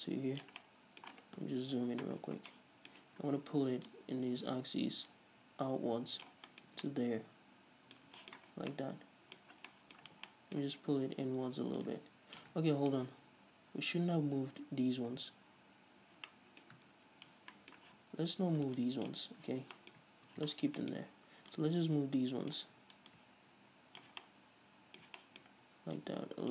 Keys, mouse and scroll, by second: 0.8-4.1 middle drag, 1.8 KP_Decimal, 2.4 scroll down 2, 4.1-6.6 drag, 6.6-11.9 middle drag, 6.9 Tab, 8.6 scroll down 2, 10.3 Tab, 11.9-16.4 drag, 12.7 ctrl+z, 15.8-16.4 scroll down 2, 16.4-18.8 middle drag, 17.1 ctrl+shift+z, 18.0 z, 18.8 ctrl+click, 19.7-21.7 middle drag, 19.7 z, 20.2-20.6 scroll up 2, 21.1-21.7 scroll up 2, 21.7-24.4 drag, 24.4-26.1 middle drag, 26.1 click.